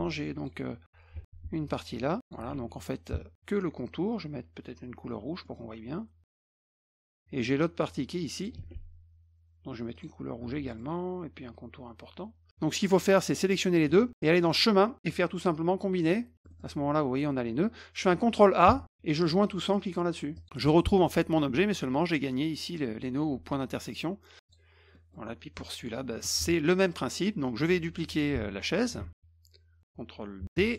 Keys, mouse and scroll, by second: 0.4 click, 1.7 click, 2.5 ctrl+z, 5.4 middle click, 6.6-7.0 scroll up 4, 7.9-8.4 drag, 8.5 ctrl+z, 9.9 click, 10.5 ctrl+z, 10.7 middle click, 11.6-12.4 scroll up 3, 13.2 shift+click, 14.4 click, 16.0 click, 16.3 middle click, 16.3 scroll, 16.5 middle click, 18.6 ctrl+a, 20.3 click, 24.4 click, 24.9 middle click, 25.6 click, 27.6 click, 28.3 click, 29.0 ctrl+z, 30.5 ctrl+d.